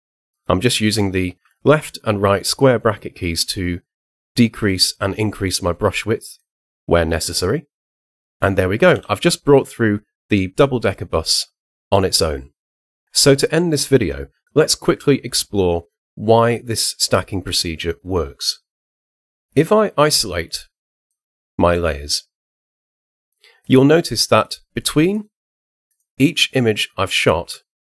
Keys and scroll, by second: 0.8 ], 1.3 [, 2.5 ], 8.9 h.